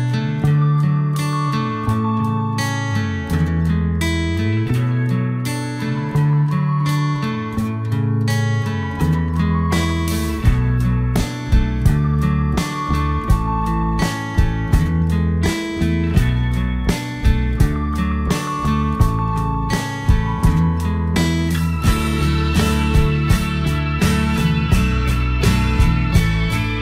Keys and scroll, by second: 3.6 alt+Delete.